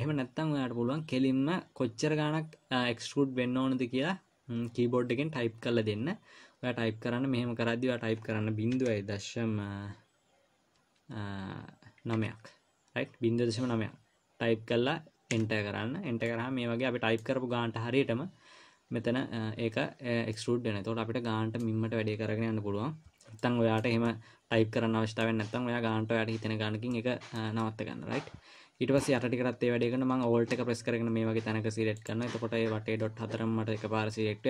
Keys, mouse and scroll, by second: 16.6 middle click, 20.7 middle click, 24.4 middle click, 28.1 middle click, 32.4 alt+click.